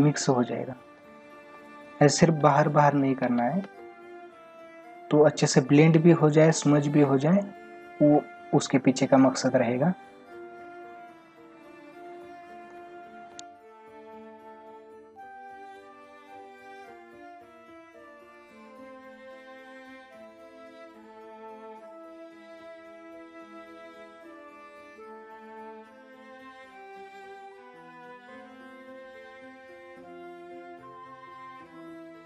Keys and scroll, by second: 1.0 space, 3.3 ctrl+alt+z, 12.7 space, 14.4 space, 17.0 space, 24.4 space, 26.1 space, 28.1 space, 31.2 space.